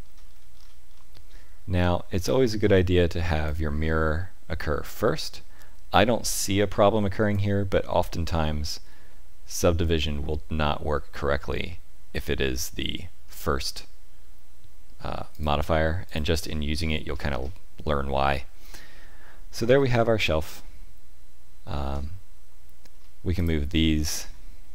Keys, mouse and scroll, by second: 0.0 shift+middle click, 0.0-0.5 scroll down 3, 0.9 scroll down 5, 3.4 click, 15.3 click, 16.0 click, 17.1-17.9 scroll up 4, 17.9-18.3 scroll down 1, 18.3 middle click, 19.5-20.8 scroll down 4, 20.1 middle click, 23.3 click, 23.7 middle click.